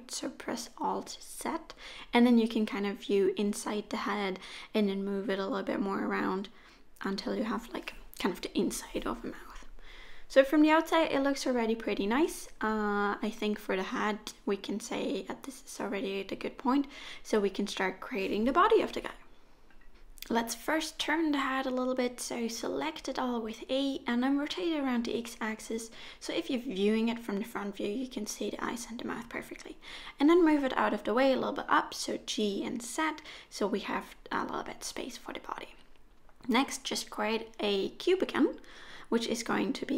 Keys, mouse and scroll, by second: 2.2 KP_3, 3.6 g, 5.6 middle click, 8.6 click, 9.4 middle click, 10.4-11.1 scroll down 4, 10.7 middle click, 11.8 click, 12.2 middle click, 14.7-15.4 scroll up 4, 15.4 middle click, 17.1-18.0 scroll down 1, 18.0 scroll down 3, 18.7 middle click, 19.9-20.3 scroll down 1, 20.3 middle click, 21.9 middle click, 23.1 a, 23.9 r, 26.6 KP_1, 28.4 middle click, 30.5 g, 33.1 scroll down 1, 33.2 middle click, 35.2 Tab, 35.9 shift+a.